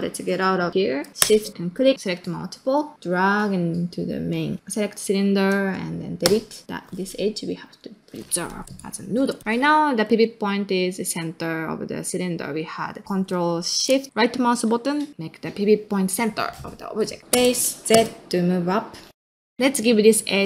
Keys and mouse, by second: 1.7-4.3 shift+drag, 6.2 x, 6.6 middle click, 7.5-9.4 drag, 9.4 o, 9.7 middle drag, 10.0 ctrl+middle drag, 10.3-10.9 middle drag, 12.5-12.8 middle drag, 14.0 ctrl+shift+right click, 16.0 middle click, 17.0 ctrl+middle drag, 17.2 click, 17.3 space, 19.1 click, 19.2 middle click, 19.4 ctrl+middle click.